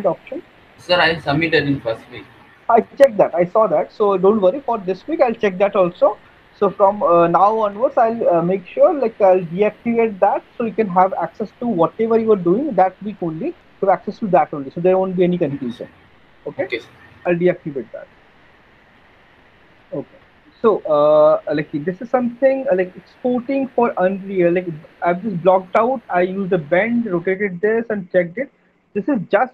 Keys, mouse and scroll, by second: 0.0 click, 4.3 click, 4.7 click, 20.7 alt+middle click, 20.9 middle click, 21.5 alt+middle click, 21.9 middle click, 22.9 alt+middle click, 24.8 middle click, 26.2 alt+middle click.